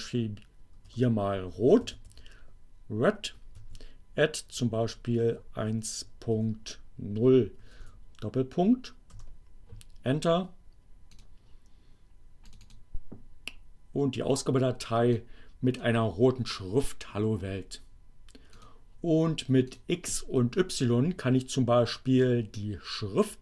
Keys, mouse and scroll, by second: 0.0-0.3 typing, 1.5-2.6 typing, 3.2 alt+q, 4.5 1, 5.6 ., 6.4 0, 7.8 shift+., 8.6 Return, 11.2 click, 12.4 click, 14.9-16.0 drag, 18.5 click, 19.8 click.